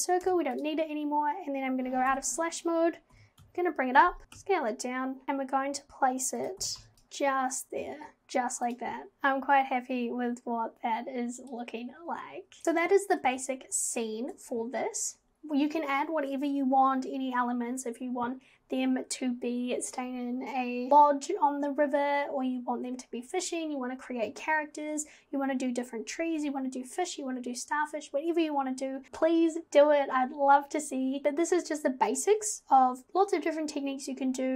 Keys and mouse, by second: 0.3 Delete, 2.1 /, 3.1 g, 4.2 g, 5.2 g, 6.6 g, 8.7 click.